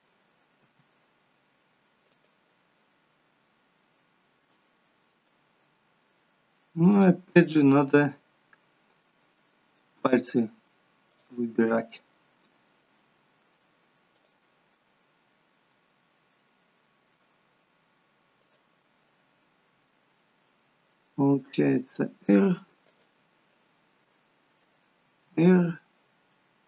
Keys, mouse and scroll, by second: 0.6 middle click, 0.6 r, 2.8-3.4 scroll up 4, 3.4 scroll down 1, 4.5 shift+middle click, 5.5-6.4 scroll up 2, 6.8 click, 7.5 middle click, 8.5-9.0 scroll down 2, 9.0 middle click, 9.8-10.4 scroll down 1, 11.1 shift+click, 11.7 middle click, 14.0 shift+click, 16.3 shift+middle click, 18.3 shift+click, 19.0 middle click, 21.0 r, 23.2 middle click, 25.0 r.